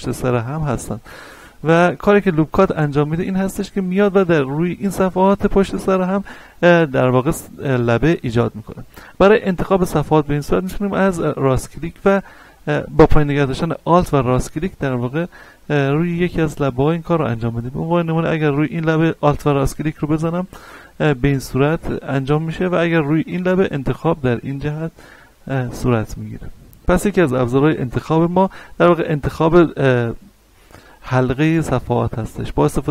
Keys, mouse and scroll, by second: 1.0 shift+right click, 1.6 shift+right click, 2.0 middle click, 3.1 shift+right click, 3.6-10.0 middle drag, 10.0-14.3 middle drag, 14.3 alt+right click, 15.1 middle click, 16.2 middle click, 17.2 alt+right click, 18.2 middle click, 21.5 alt+right click, 24.6-32.9 middle drag.